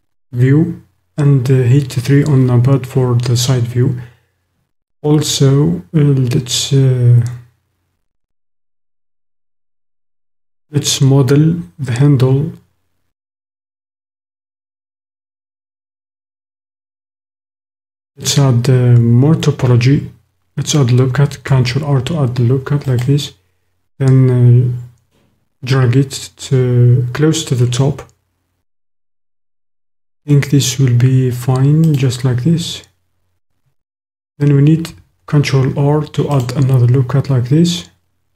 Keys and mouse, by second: 21.4 ctrl+r, 31.8 click, 34.8 ctrl+r.